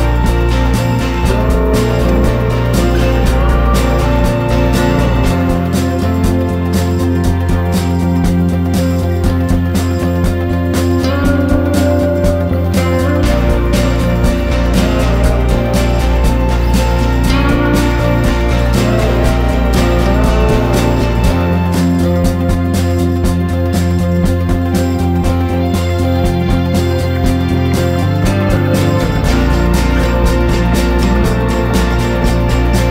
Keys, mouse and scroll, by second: 0.5 click, 1.5 ctrl+shift+g, 2.2 click, 3.6 ctrl+shift+g, 4.4 click, 5.5 ctrl+shift+g, 6.2 click, 6.7 ctrl+shift+g, 7.4 click, 8.5 ctrl+shift+g, 9.4 click, 10.1 ctrl+shift+g, 11.0 click, 16.5 F4, 17.0-23.8 drag, 24.4 F4, 25.4 ctrl+z, 25.9 click, 29.8 click, 30.8 click, 31.6 F4, 32.1 click.